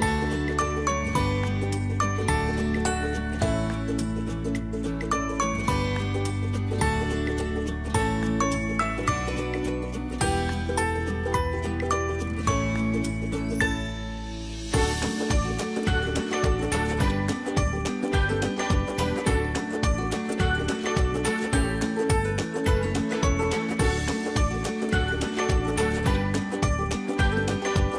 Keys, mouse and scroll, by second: 3.2 space, 4.7 click, 4.8-6.9 typing, 5.5 click, 5.6 click, 6.0 click, 6.8 click, 7.9-10.5 drag, 10.5 space, 10.8 ctrl+click, 12.8 space, 13.3-23.2 alt+drag, 16.8 typing, 23.2-24.9 typing, 23.6 click, 24.0 alt+click, 26.0 typing, 26.7 click, 27.5 space, 27.7 click.